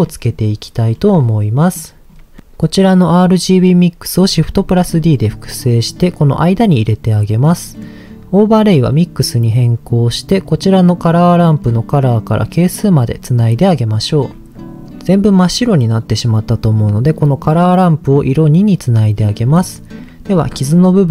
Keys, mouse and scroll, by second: 0.0 middle click, 0.9-1.5 scroll down 4, 1.5 middle click, 2.0-2.3 scroll down 2, 2.3 middle click, 2.7 click, 4.6 shift+d, 5.8 click, 6.9 click, 7.7 middle click, 8.3 click, 11.5-13.1 drag, 13.7 middle click, 13.9-14.5 scroll up 4, 18.1 click, 19.3-20.1 scroll up 4, 20.3-21.1 scroll up 1.